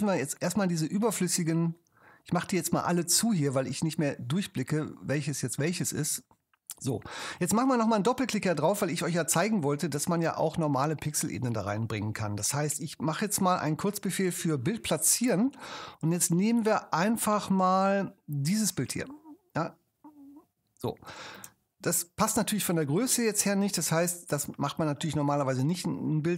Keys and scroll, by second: 14.0 ctrl+super+y, 21.8 super+-.